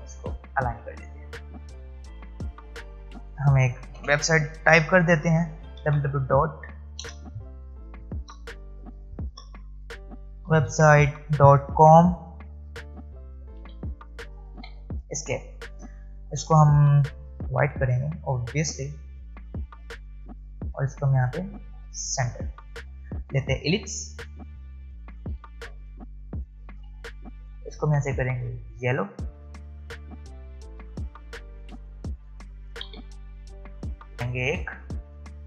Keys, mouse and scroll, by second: 3.9 space, 5.4-6.5 typing, 8.4-14.1 typing, 17.3 click, 20.6-23.2 drag, 23.2 l, 24.9-27.2 alt+shift+drag, 27.2 alt+scroll up 1, 28.7 click, 30.9 space, 31.8 space, 32.9 v, 33.6-35.4 drag.